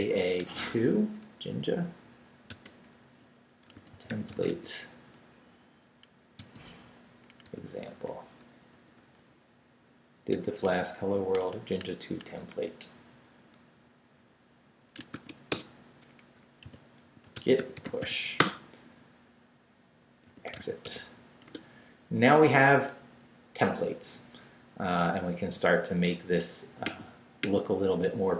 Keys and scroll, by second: 0.0-0.9 typing, 2.5-5.0 typing, 6.4 space, 7.5 e, 7.9 x, 8.7 BackSpace, 15.1 shift+', 15.5 shift+Return, 16.3 Return, 16.4-18.5 typing, 20.0-21.3 typing, 21.5 Return.